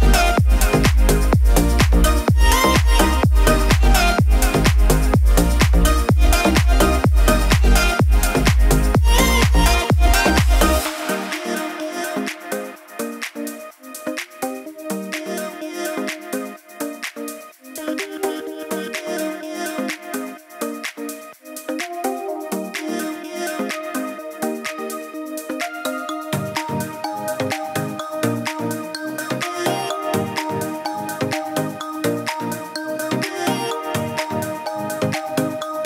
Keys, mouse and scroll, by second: 1.6 click, 3.0-3.6 middle click, 4.0 click, 4.6-5.1 scroll up 1, 5.1 middle click, 5.5-6.0 scroll up 1, 6.0 middle click, 6.6 click, 8.4-9.0 middle drag, 9.7-11.0 drag, 11.0-11.6 middle click, 12.0-13.0 click, 13.0-13.6 middle click, 14.2-15.5 drag, 18.1-19.4 middle drag, 20.0-22.2 drag, 28.4 click.